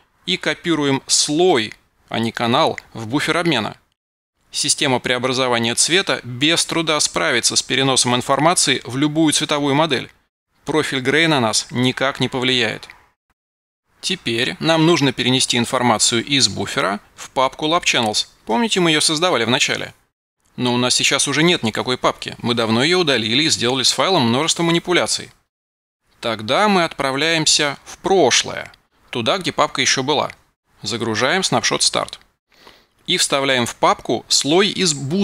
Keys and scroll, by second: 1.9 super+c.